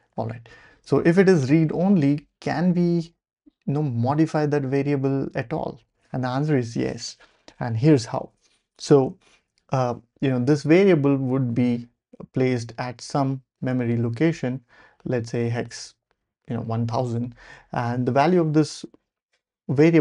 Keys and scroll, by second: 0.8 ctrl+l, 7.0 ctrl+alt+super+p.